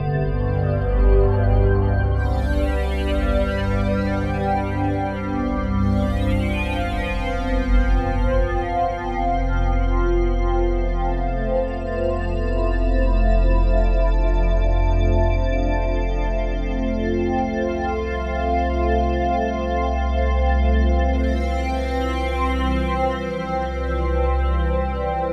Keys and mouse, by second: 1.0 click, 2.3 click, 2.9 click, 3.6 click, 4.1 ctrl+alt+click, 4.6 alt+click, 5.2 click, 6.1 ctrl+t, 7.1 click, 8.7 click, 12.1 click, 13.4 click, 15.8 click, 16.9 click, 18.3 click, 18.4 click, 20.1 click, 20.3 click, 21.7 click, 22.1 click, 22.3 click, 22.7 click, 22.9 click.